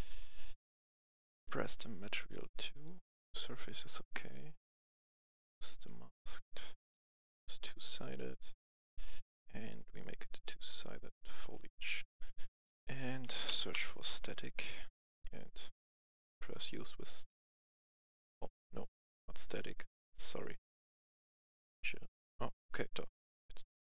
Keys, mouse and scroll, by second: 9.9 click, 13.5 click, 15.9-21.9 drag.